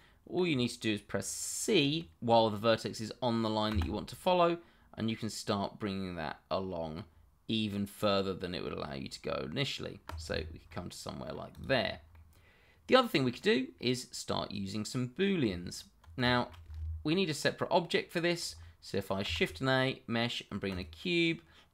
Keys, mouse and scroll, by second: 3.7 c, 10.0 click, 10.4 scroll down 1, 10.6 middle click, 11.5 click, 11.8-12.1 scroll down 1, 12.1 middle click, 15.4 Tab, 16.3 shift+middle click, 17.0-17.4 scroll down 1, 17.4 middle click, 19.4 shift+a, 20.7 click.